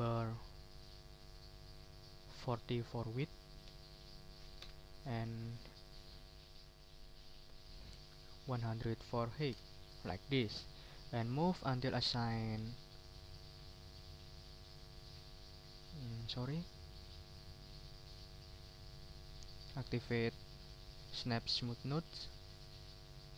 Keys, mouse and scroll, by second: 1.5 click, 1.9 ctrl+click, 2.7 ctrl+a, 3.2 ctrl+4, 3.6 ctrl+0, 4.6 Return, 5.3 ctrl+click, 5.9 ctrl+a, 8.2-9.1 typing, 9.5 Return, 10.3 scroll down 2, 10.4 click, 11.3-12.7 drag, 13.2 ctrl+middle click, 13.8 ctrl+click, 14.8-16.2 drag, 17.9 click, 18.8-19.9 drag, 22.4-23.3 drag.